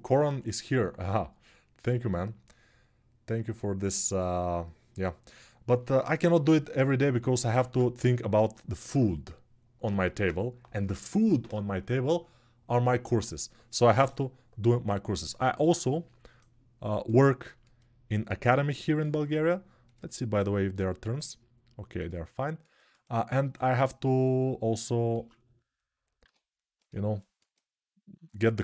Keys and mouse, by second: 7.3 ctrl+Tab, 24.9 ctrl+Tab, 25.9-28.6 right drag, 25.9 q.